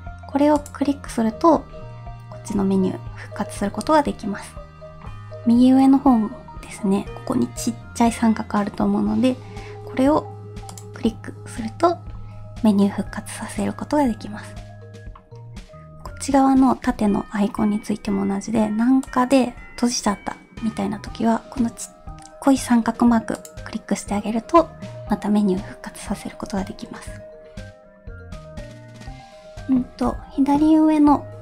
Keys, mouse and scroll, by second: 0.6 click, 10.7 click, 19.1 click, 23.4 click.